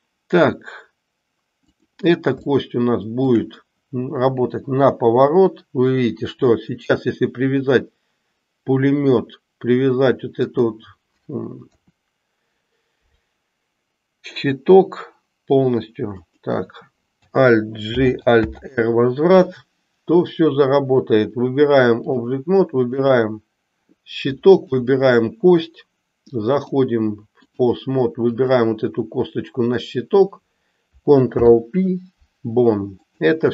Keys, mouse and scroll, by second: 1.6 click, 2.5-3.5 shift+middle drag, 4.1 r, 11.7 r, 17.8 alt+g, 18.5 alt+r, 20.7-22.2 drag, 26.5-27.6 drag, 31.2 ctrl+p.